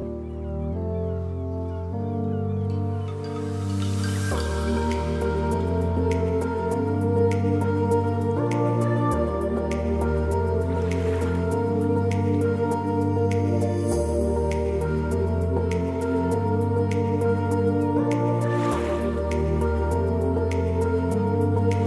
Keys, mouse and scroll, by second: 1.2 click, 4.5-6.5 drag, 6.5-8.1 drag, 11.2-17.4 drag, 19.6-21.8 drag.